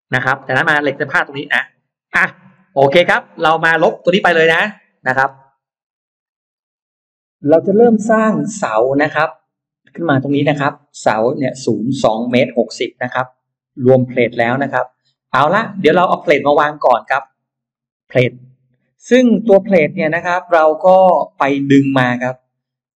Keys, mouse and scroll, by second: 0.0 shift+click, 0.9-2.1 shift+drag, 2.3 shift+right click, 2.7 shift+right click, 3.6 click, 5.1 Delete, 7.1-8.4 scroll up 3, 8.5 middle click, 9.7 scroll down 2, 10.1 middle click, 12.2 shift+x, 12.7-14.5 shift+drag, 14.7 shift+right click, 15.0 shift+right click, 15.7 middle click, 16.3-16.9 scroll up 2, 17.7 middle click, 18.9-19.3 scroll up 2, 20.1 scroll down 2, 20.5 middle click, 22.1 click.